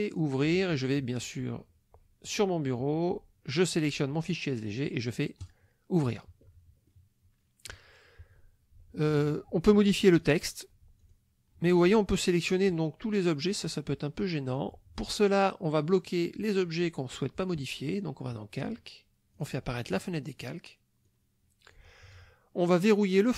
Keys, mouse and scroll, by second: 0.1 click, 2.3 click, 3.6 click, 5.4 click, 6.9 middle click, 7.3 click, 10.2 click, 11.0 click, 11.7 click, 12.5 click, 13.4 click, 14.5 click, 16.1 click, 19.4 click, 21.1 click, 23.2 click.